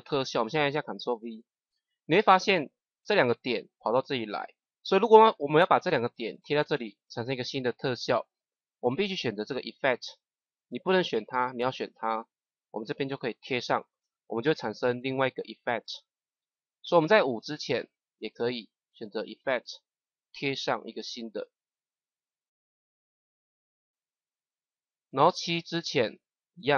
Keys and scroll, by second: 1.0 ctrl+v, 2.6 ctrl+z, 13.3 ctrl+v, 20.3 ctrl+v.